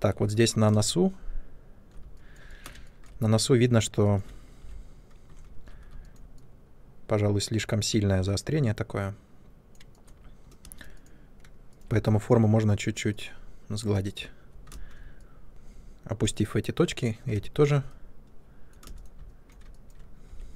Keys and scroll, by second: 0.6 ctrl+space, 4.5 3, 5.4 ctrl+1, 10.5 space, 11.8 w, 14.6 ctrl+space, 15.5 w, 17.2 ctrl+space, 20.2 3.